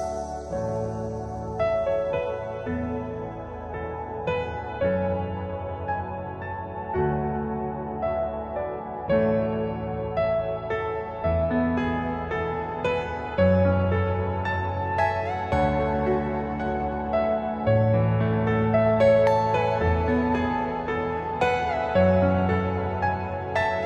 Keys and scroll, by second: 0.3 F4, 1.8-2.7 typing, 3.7 Escape, 11.1 F3, 12.4 ctrl+Page_Down, 16.0 ctrl+g, 16.3 F4, 19.3 F2.